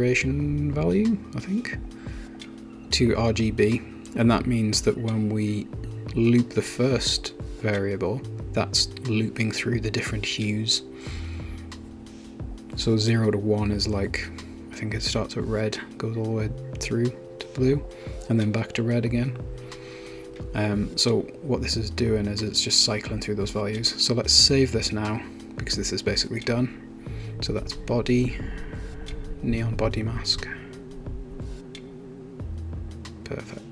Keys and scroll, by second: 21.7 shift+super+s, 22.8 super+s, 26.4-27.4 typing, 27.6 super+a, 29.3-33.4 typing, 31.7 Delete, 31.8 Delete.